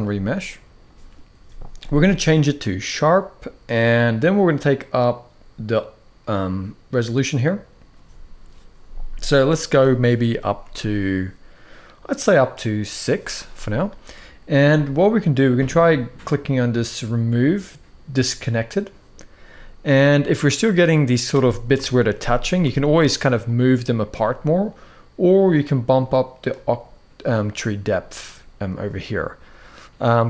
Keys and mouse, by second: 7.1 click, 10.2 z, 12.0 click, 13.1 z, 18.3 click, 19.2-19.7 middle drag, 21.4 KP_7, 22.3 `, 26.2 click.